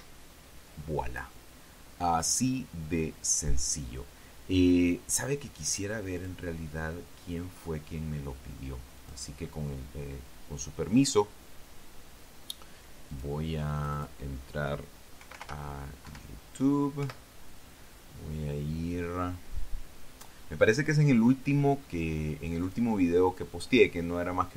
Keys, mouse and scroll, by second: 0.7 Escape, 3.1 click, 7.0 click, 9.8 click, 13.9 click, 14.6 click, 15.8-16.7 typing, 16.9 Down, 17.9 Return, 23.4 click.